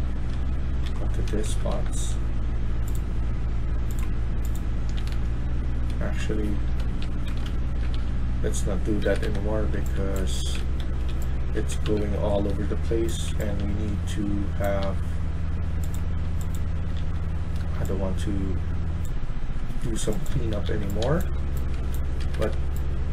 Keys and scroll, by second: 0.0-2.1 typing, 4.8-6.3 typing, 6.8 ctrl+z, 8.9 Escape, 9.1 Escape, 9.5-13.8 typing, 16.5-17.3 typing, 19.8-23.1 typing, 22.3 Escape.